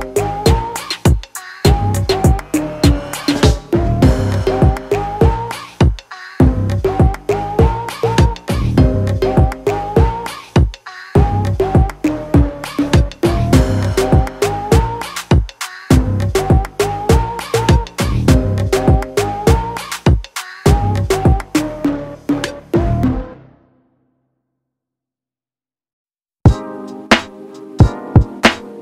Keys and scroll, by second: 10.5 ctrl+m.